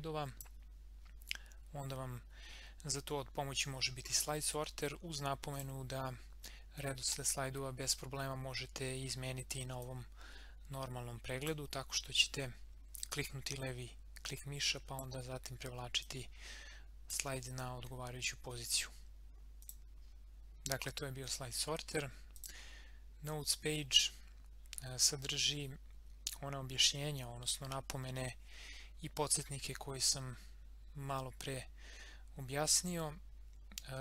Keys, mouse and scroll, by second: 5.5 click, 6.7 scroll up 1, 9.8-11.7 drag, 11.7 scroll up 1, 13.1-15.2 drag, 15.2 scroll up 1, 16.0-19.4 drag, 19.6 click, 22.3 click, 25.2-25.5 scroll up 1, 31.6-34.0 scroll down 1.